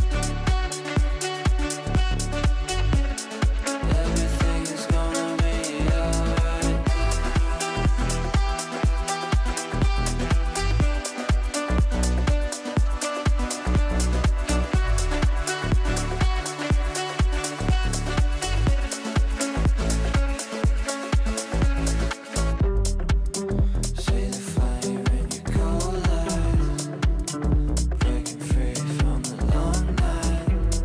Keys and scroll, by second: 14.7 Delete, 18.7 Delete, 22.0 Delete.